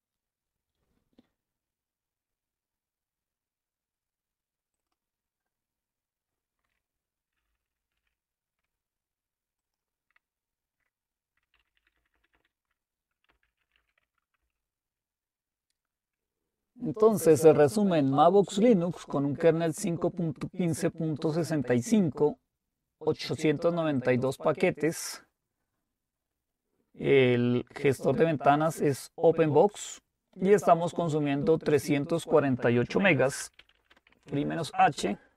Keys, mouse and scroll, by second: 0.1 click, 4.8 click, 7.9 ctrl+`, 9.6-10.8 drag, 11.5 ctrl++, 11.8 ctrl++, 12.0 ctrl++, 12.1 ctrl++, 12.3 ctrl++, 13.1-14.3 typing, 14.4 Return, 24.0 click, 29.7 click, 32.2-33.3 drag, 32.8-34.9 typing.